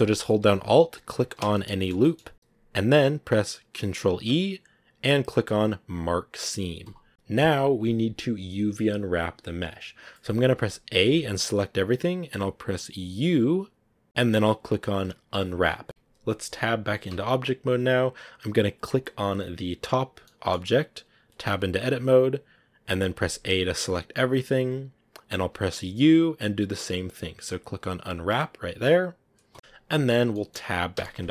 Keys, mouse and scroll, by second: 1.1 alt+right click, 1.4-6.8 middle drag, 6.8 ctrl+e, 7.1-10.7 middle drag, 10.7 a, 10.9 a, 15.8 Tab, 17.0 Tab, 19.6 right click, 20.1-21.3 middle drag, 21.3 Tab, 23.0 a, 23.2 a, 30.2 middle click, 30.8 Tab.